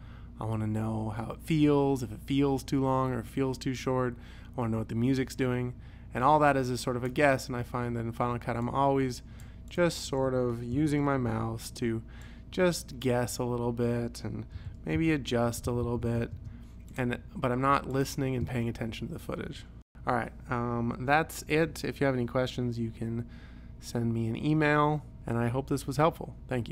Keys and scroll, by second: 10.8 u, 11.3 p, 14.6 /, 15.0 ., 15.5 ,, 16.4 space, 18.4 space.